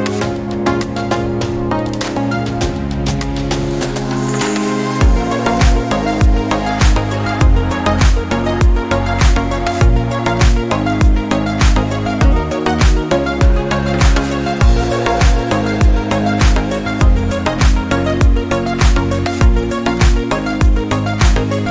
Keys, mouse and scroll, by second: 0.5 1, 2.5 click, 3.4 1, 4.2 Return, 7.5-21.7 drag.